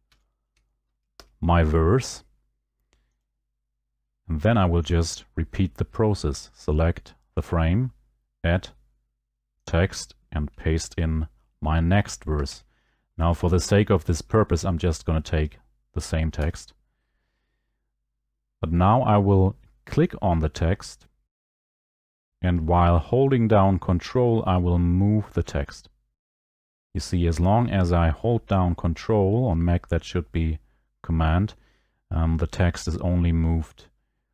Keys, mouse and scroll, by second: 0.1 ctrl+v, 1.1 Escape, 3.2 click, 4.9 click, 7.5 right click, 9.7 click, 12.6 ctrl+v, 16.3 Escape.